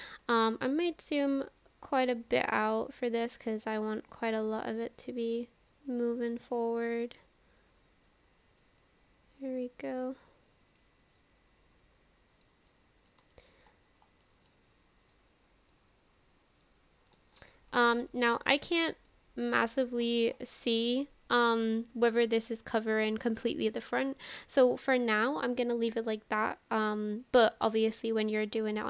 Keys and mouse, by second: 1.1 click, 2.7-3.8 drag, 6.6-8.6 drag, 8.8 middle click, 10.8-12.5 drag, 12.7 middle click, 13.3 shift+middle click, 14.2 middle click, 15.1 click, 16.1 click, 18.1 middle click, 19.1 middle click, 20.7 shift+middle click, 21.0-23.4 middle drag, 24.1 shift+middle click, 25.7 click, 27.2-28.4 middle drag.